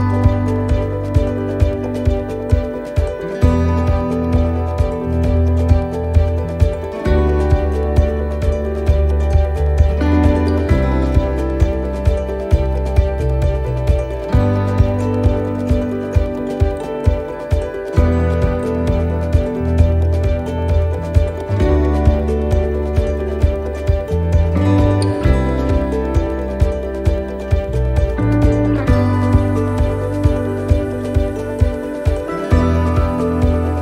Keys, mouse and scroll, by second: 1.6 click, 2.1-2.5 scroll down 4, 2.7 shift+middle click, 3.0-4.1 scroll up 1, 4.1 click, 4.1-4.7 scroll up 1, 5.5 shift+middle click, 5.9 scroll down 1, 8.2 right click, 10.1 click, 18.9 click, 21.3 click, 23.5 click, 28.0 click, 29.6 click, 32.5 scroll up 2.